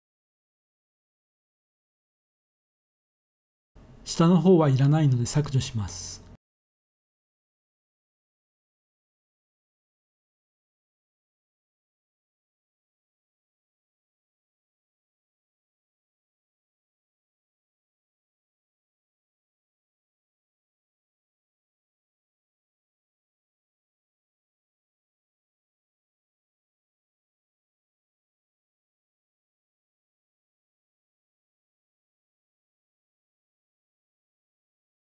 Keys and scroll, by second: 0.6 3, 4.7 x, 11.0 z, 14.6 3, 18.6 s.